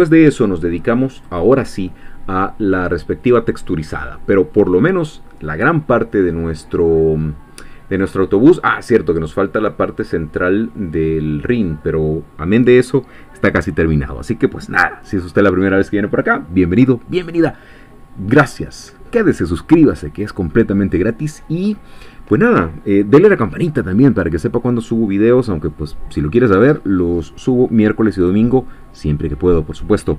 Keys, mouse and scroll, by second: 1.2 click.